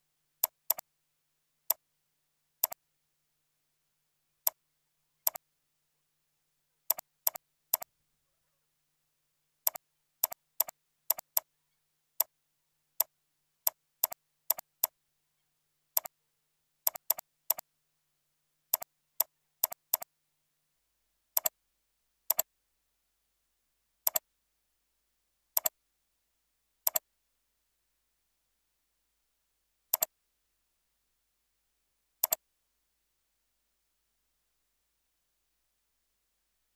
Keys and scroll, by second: 0.1 ctrl+b, 7.2 ctrl+c, 8.0 ctrl+a, 8.7 ctrl+v, 9.3 ctrl+v, 10.8 ctrl+v, 14.4 ctrl+c, 14.9 ctrl+a, 15.2 ctrl+v, 18.3 ctrl+v, 24.4 ctrl+a.